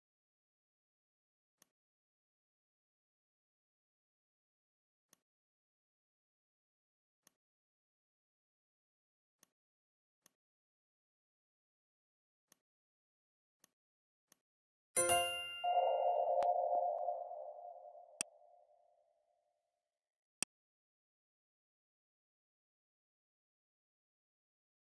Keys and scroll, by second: 4.2 r, 6.4 v, 13.3 z, 13.9 space, 14.7 v.